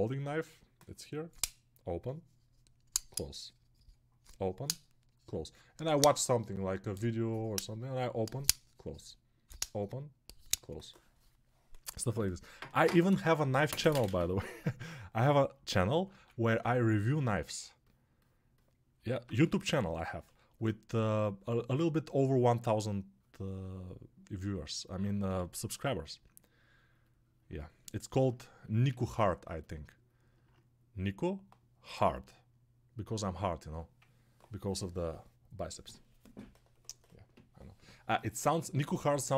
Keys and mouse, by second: 23.8 alt+click, 24.9-39.3 drag.